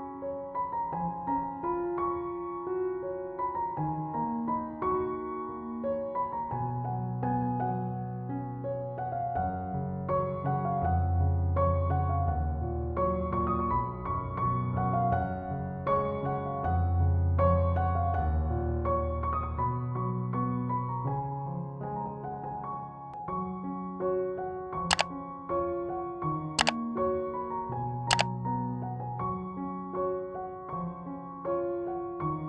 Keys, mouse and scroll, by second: 5.1 right click, 7.9-32.4 drag.